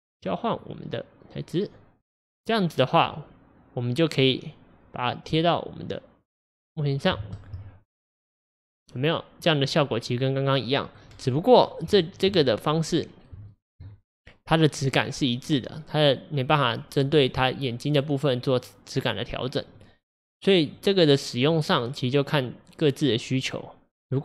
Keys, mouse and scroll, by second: 0.2 click, 2.1-6.5 middle drag, 6.5-7.4 drag, 9.0-11.1 middle drag, 11.1-11.6 scroll up 2, 12.0-19.8 shift+middle drag, 19.8-21.9 drag, 21.9-24.2 middle drag.